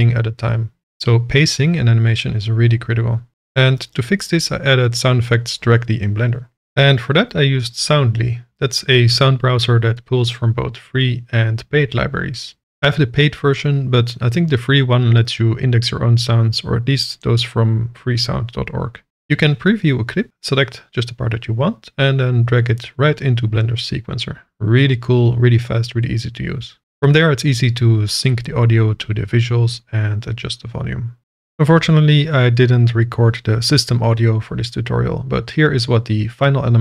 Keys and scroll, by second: 13.4 space, 21.2 space, 26.8 space, 28.5 KP_0, 28.6 KP_Decimal, 28.8 KP_Enter, 29.7 0, 29.9 Return.